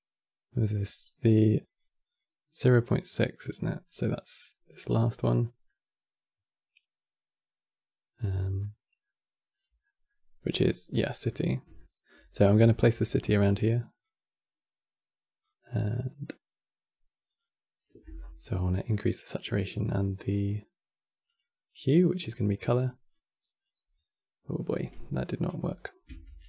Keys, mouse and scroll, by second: 1.3 click, 1.8 click, 3.3-4.4 middle drag, 4.4 click, 4.7-7.8 middle drag, 8.3-9.2 middle drag, 9.2 click, 9.5-12.9 middle drag, 12.9-20.0 drag, 22.8-25.8 drag, 26.0 ctrl+z.